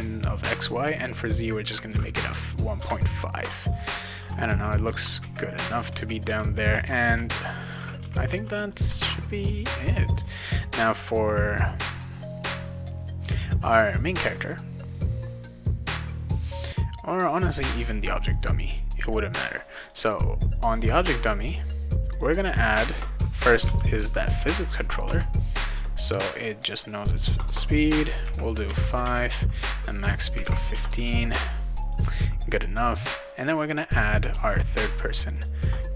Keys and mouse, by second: 3.9-5.0 right drag, 3.9-8.8 typing, 5.3 right click, 6.1 right click, 6.8-8.7 right drag, 9.0 ctrl+s, 10.1 click, 14.9 click, 17.3 click, 19.8 click, 22.1 click, 23.6 p, 24.0 h, 25.0 Return, 26.7 click, 26.9 click, 28.7 Tab, 29.0 Tab, 31.8 click, 33.5 click, 35.3 click, 35.8-35.9 typing.